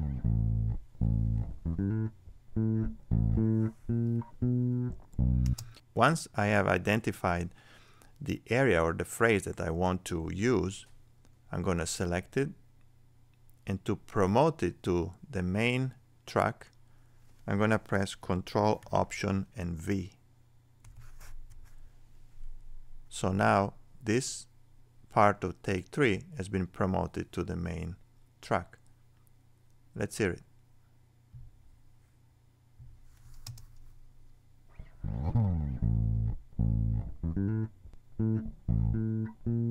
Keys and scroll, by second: 20.8 ctrl+alt+v.